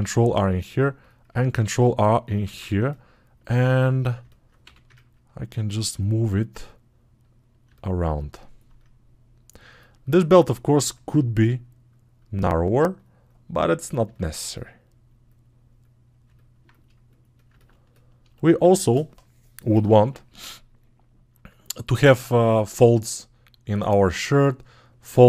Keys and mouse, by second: 2.4 ctrl+Tab.